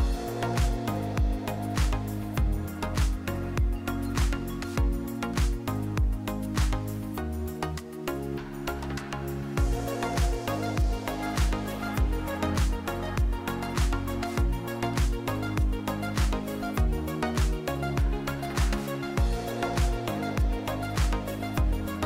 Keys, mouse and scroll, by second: 0.7-1.1 middle drag, 1.6 r, 2.6 drag, 2.9 middle drag, 4.5 click, 5.5 r, 6.4 click, 8.4 click, 9.0-11.1 drag, 10.5 KP_0, 11.9 click, 12.7-14.0 drag, 13.4 KP_0, 15.3-15.6 middle drag, 17.7 click, 18.3 KP_0, 21.5 click.